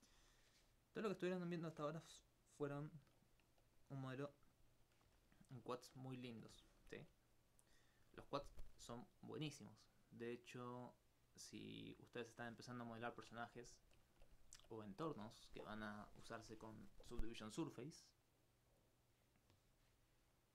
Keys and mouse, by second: 0.2 Tab, 1.1 click, 1.7 Tab, 2.3 alt+click, 12.8 right click, 12.9 alt+right click, 17.3 middle click, 18.7 click.